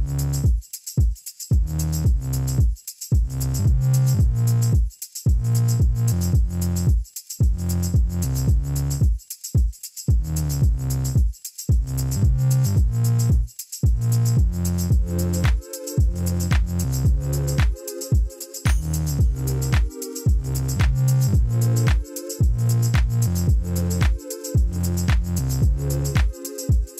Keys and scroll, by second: 1.0 g, 1.4 x, 6.2 i, 8.0 g, 8.5 x, 9.7 e, 14.2 i, 19.7 e, 21.7 i, 24.9 ctrl+r, 25.8 Return, 26.6 g.